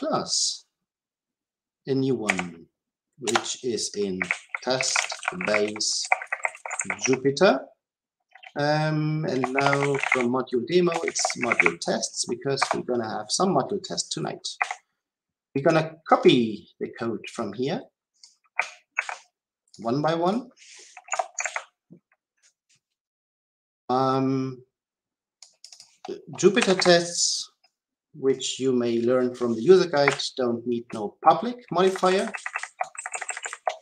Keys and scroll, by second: 18.9 ctrl+c, 26.6 Delete.